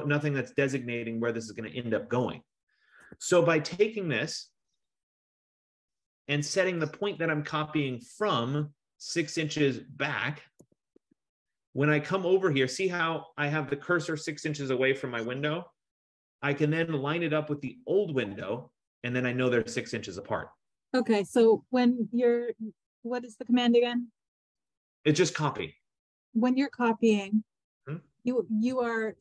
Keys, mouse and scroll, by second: 0.5 typing, 3.2 Escape, 5.0 click, 5.6 click, 6.0-6.9 typing, 10.4-11.5 typing, 13.6 F15.